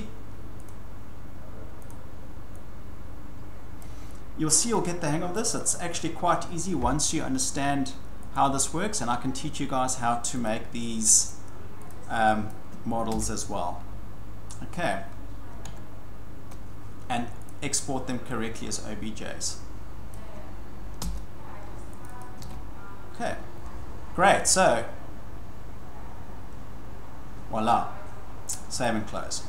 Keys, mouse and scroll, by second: 0.7 click, 1.9 click, 3.8 click, 5.3 click, 5.6-6.8 scroll, 7.0 scroll, 8.3 click, 10.5 click, 11.3 click, 11.9 click, 12.5 click, 13.1 ctrl+v, 15.6 alt+Tab, 17.5 click, 20.1 click, 21.0 ctrl+c, 22.0 click, 22.2 click, 22.4 ctrl+v, 28.8 click.